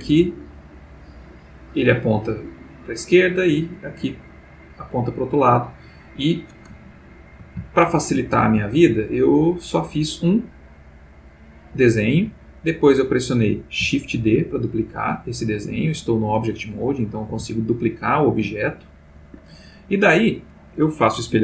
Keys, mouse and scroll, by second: 6.8-7.5 ctrl+middle drag, 7.7-8.2 ctrl+shift+middle drag, 9.1 click, 10.5-12.8 drag, 14.2 shift+d, 15.7 Escape, 17.3 g, 19.2 Escape.